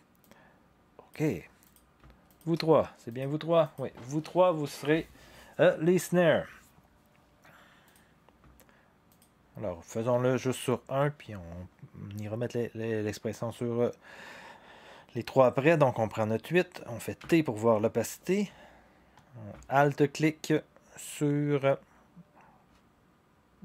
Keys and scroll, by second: 17.2 t.